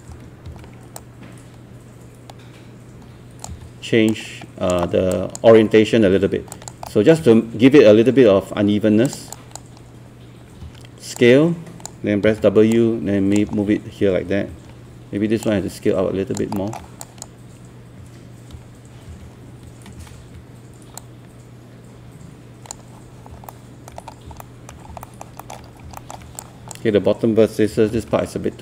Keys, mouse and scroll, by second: 0.1 e, 0.5 r, 1.0-5.1 drag, 6.5 alt+click, 6.9 alt+middle click, 9.1-10.4 drag, 10.6 r, 11.2 click, 12.3 w, 12.7 click, 14.5 r, 15.4 click, 16.6 alt+middle click, 17.0 click, 19.1-20.5 typing, 21.0-23.3 drag, 23.5 alt+middle click, 24.1 scroll up 1, 24.4 alt+middle click, 24.8 scroll down 1, 25.0 alt+middle click, 25.7 scroll up 1, 26.0 alt+middle click, 26.4 click, 27.5-28.5 typing.